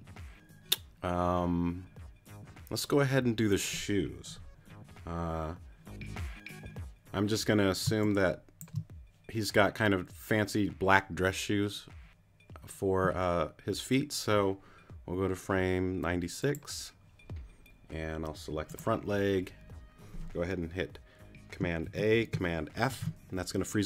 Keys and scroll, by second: 7.9 space, 21.9 super+a, 22.9 super+f.